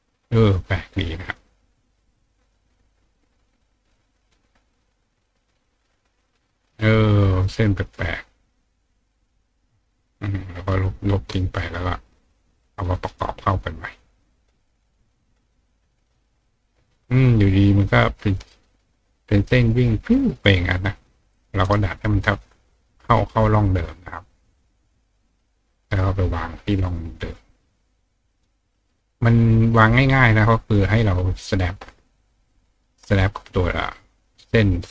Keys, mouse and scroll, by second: 1.2 click, 3.6 click, 5.5-5.9 drag, 7.9 click, 8.4 click, 9.7 click, 9.9-11.9 drag, 12.9-14.0 drag, 14.2 click, 14.5 click, 15.7-16.9 drag, 17.1 click, 18.0-20.1 drag, 20.4 click, 21.3 click, 21.6 right click, 22.8 click, 24.6 click, 25.5-28.4 drag, 29.7 click, 30.4 click, 32.7 click, 33.8-34.9 drag.